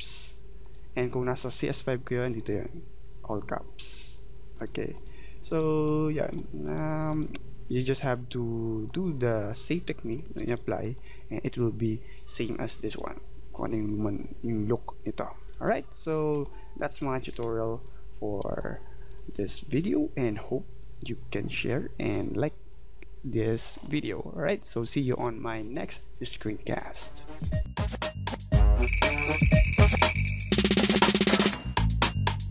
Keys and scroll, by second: 16.4 space.